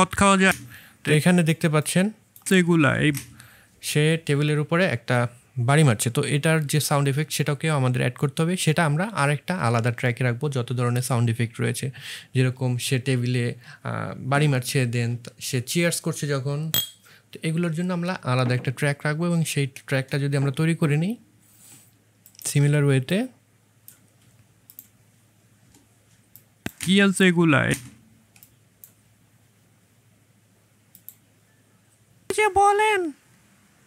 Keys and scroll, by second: 0.4 space, 3.0 space, 25.5 Delete, 26.7 space.